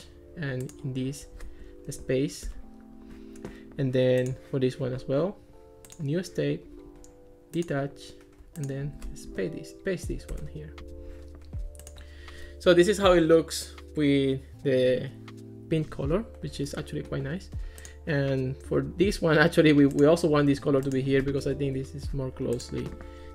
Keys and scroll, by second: 1.9 super+v, 2.5 Return, 9.3 super+v, 10.3 Return, 21.4 super+v, 21.7 Return.